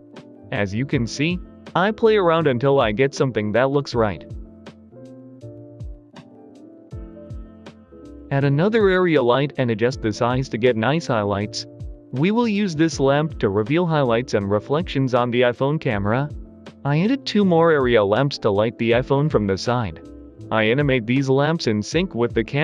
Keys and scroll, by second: 0.0-2.0 typing, 1.1 Down, 1.2 Return, 3.2 i, 3.2 Return, 7.2-8.9 typing, 9.7 Escape, 10.7 typing, 11.2 Escape, 12.3-20.3 typing, 12.4 Return, 14.1 Return, 15.1 Escape, 15.4 Delete, 19.5 Escape, 21.4 Escape, 21.4-22.6 typing.